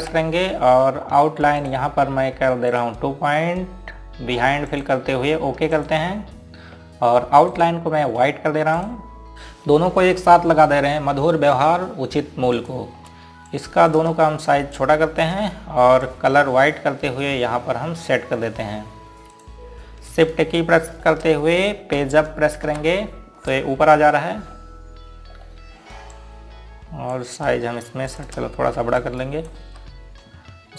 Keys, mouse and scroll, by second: 1.0 F12, 2.6 click, 8.6 right click, 9.5 click, 14.7 click, 15.8 shift+click, 17.1 click, 23.7 shift+Page_Up, 25.5 scroll up 1, 27.2 click, 30.0 shift+click, 30.3 scroll down 1, 30.4 click.